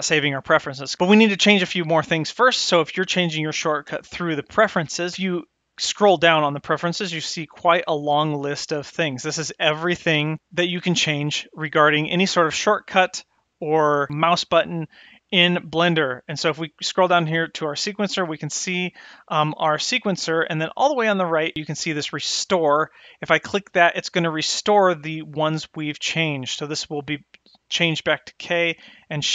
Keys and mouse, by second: 25.6-29.3 drag.